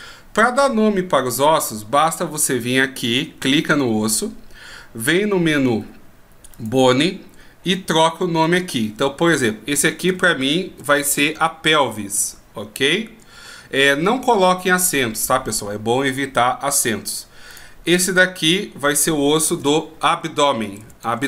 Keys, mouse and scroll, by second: 6.7 click, 8.6 click, 17.7 right click, 18.6 click.